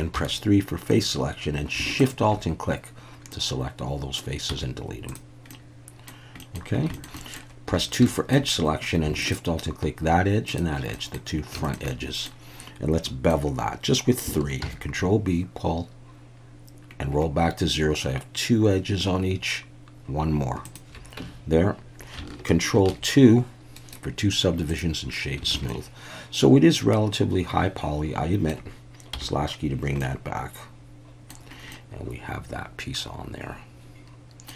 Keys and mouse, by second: 0.2 3, 1.9 shift+a, 2.0 shift+click, 3.3 middle click, 4.5 x, 5.5 middle click, 6.4 middle click, 6.9 shift+middle click, 7.2 middle click, 7.7 2, 8.1 shift+middle click, 9.3-10.8 alt+shift+drag, 10.9 middle click, 11.6 shift+middle click, 11.9 middle click, 13.0 middle click, 14.6 ctrl+b, 20.7 shift+click, 21.2 Tab, 22.7 ctrl+2, 23.8-25.1 right drag, 25.5 alt+a, 25.7-28.5 middle drag, 29.1 /, 30.0-31.3 middle drag, 31.7-34.5 middle drag.